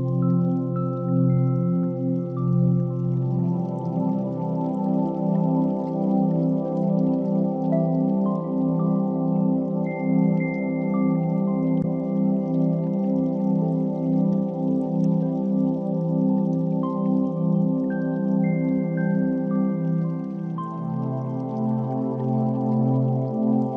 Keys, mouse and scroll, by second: 0.3 click, 1.7 click, 4.5-6.2 drag, 7.2 drag, 8.3-11.2 drag, 9.4 0, 12.0 click, 12.6 click, 13.7 click, 14.8-15.4 drag, 15.9-16.4 middle drag, 16.7 g, 16.7 y, 17.8 drag, 18.4 KP_0, 20.2-20.8 drag, 21.2-21.6 ctrl+drag, 22.2 g, 22.4 z, 23.2 click, 23.5 r.